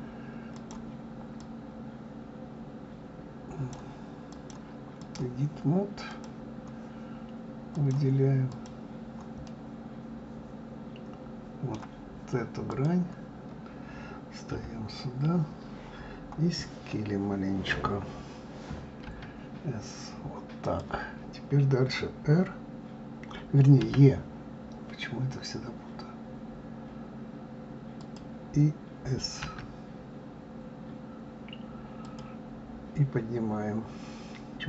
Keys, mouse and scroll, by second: 0.5 click, 1.4-6.2 drag, 7.7 click, 9.5-12.4 middle drag, 12.7 click, 14.5 KP_3, 23.8 e.